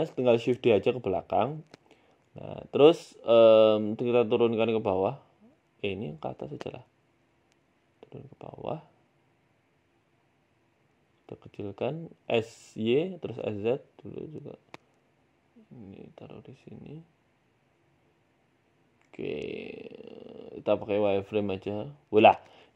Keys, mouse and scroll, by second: 2.1-3.1 scroll up 6, 2.4 shift+middle click, 3.1 Tab, 3.5 click, 5.1 Tab, 5.6 Tab, 6.0 click, 6.7 g, 7.7 Tab, 8.2 g, 10.5 right click, 10.8 s, 13.9 right click, 13.9 s, 14.0 Tab, 14.5 click, 15.1 g, 16.8 s, 17.7 s, 19.8 KP_7, 20.3 z, 20.7 z, 21.3 shift+middle click, 22.5 Tab.